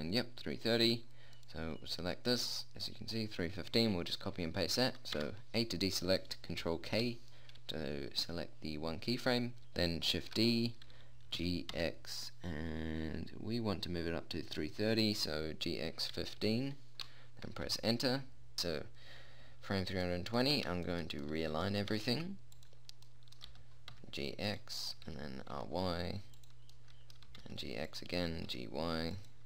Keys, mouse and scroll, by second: 5.6 a, 7.3 ctrl+k, 9.6 shift+s, 10.6 shift+d, 18.1 ', 20.5-22.2 middle drag, 22.2 g, 23.9 g, 25.4 r, 27.7 g, 28.6 g.